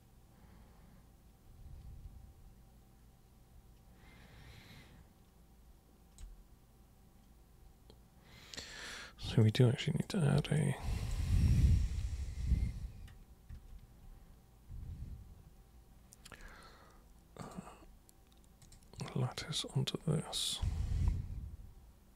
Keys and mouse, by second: 9.4 super+right click, 10.3 super+space, 10.5 click, 13.5 super+1, 17.4 super+click, 18.6 super+click.